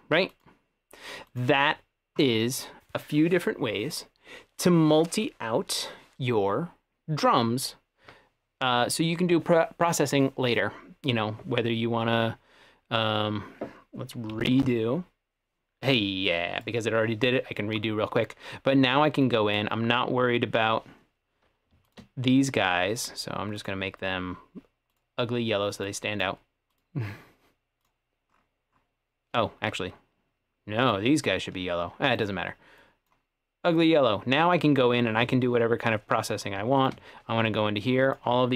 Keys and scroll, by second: 14.4 shift+super+z.